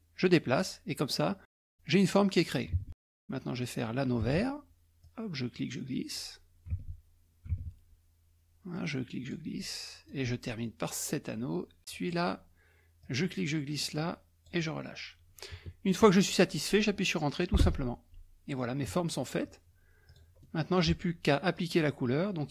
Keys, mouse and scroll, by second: 2.8 alt+Tab, 4.2 alt+Tab, 5.1-6.5 drag, 6.7 alt+Tab, 7.5 alt+Tab, 8.8 click, 9.6 scroll down 2, 9.6 middle click, 12.0 click, 13.1-14.9 drag, 15.6-16.3 ctrl+scroll down 1, 17.7 Return, 19.0-19.9 ctrl+scroll down 2, 20.1 click, 20.4 middle click, 21.6 click.